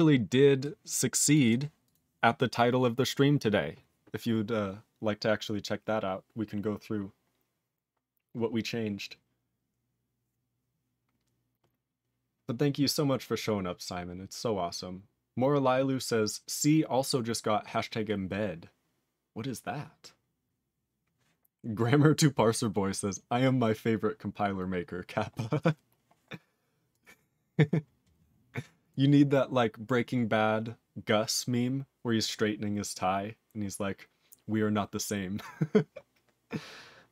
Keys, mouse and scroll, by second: 0.0-0.6 scroll up 6, 0.6 click, 1.3 click, 1.4 click, 1.5 click, 1.8 click, 1.9 click, 5.8-7.3 scroll down 3, 7.3-8.0 scroll down 2, 8.0 scroll down 4, 8.6-9.3 scroll down 5.